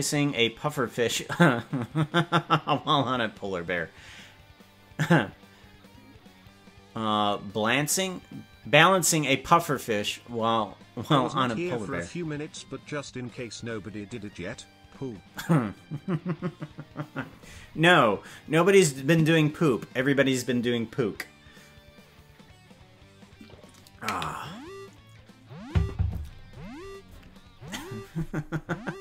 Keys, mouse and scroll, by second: 28.6-29.0 scroll up 4.